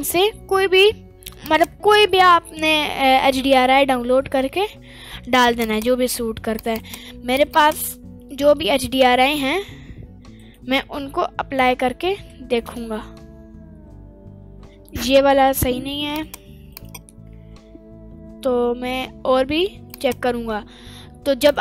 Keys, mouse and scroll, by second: 0.0 click, 10.4-12.6 drag, 16.1 click, 16.7 click.